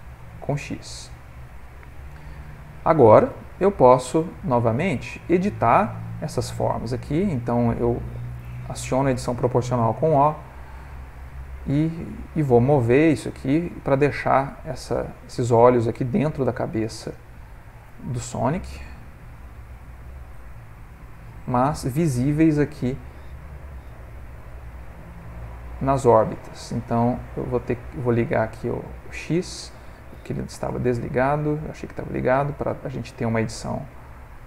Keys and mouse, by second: 0.6 middle click, 0.8 middle click, 1.5 middle click, 4.5 click, 5.2 ctrl+middle click, 5.9 shift+middle click, 6.0 shift+middle click, 6.2 ctrl+middle click, 7.1 click, 8.7 o, 10.2 g, 15.8 click, 17.1 click, 18.6 g, 21.9 click, 22.6 click, 23.9 g, 28.4 click, 30.1 ctrl+z, 30.3 ctrl+z, 30.7 ctrl+z, 31.0 ctrl+z, 33.2 g.